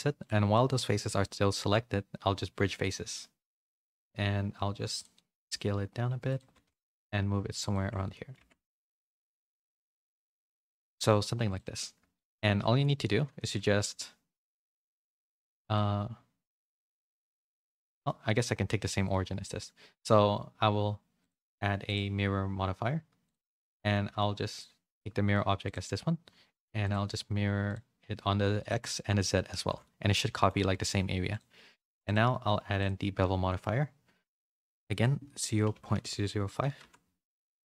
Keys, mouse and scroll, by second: 0.7-3.1 right drag, 3.1 middle click, 3.5 a, 3.8 s, 5.1 middle click, 5.7 s, 6.4 g, 7.7 Tab, 8.0 middle click, 8.6 Tab, 8.6 a, 8.9 s, 9.6 Tab, 9.9 a, 10.0 a, 10.1 middle click, 12.1 shift+middle click, 12.6 middle click, 13.6 ctrl+a, 15.7 middle click, 18.4 middle click, 21.8-23.2 drag, 24.4 click, 26.8 click, 27.6 click, 28.5 click, 29.5 a, 29.6 a, 29.8 middle click, 30.5 a, 30.7 a, 31.3-32.8 drag, 34.4-37.5 drag, 36.0 0.